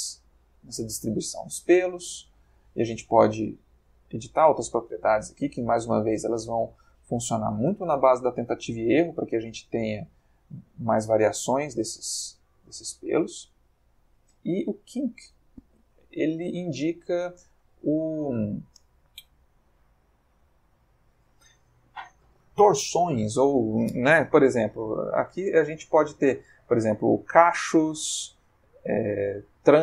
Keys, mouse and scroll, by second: 2.1 middle click, 5.1-7.5 drag, 7.0 Escape, 7.7-12.2 drag, 13.3 click, 14.3 click, 15.9-20.3 ctrl+middle drag, 25.6 click, 29.1 click.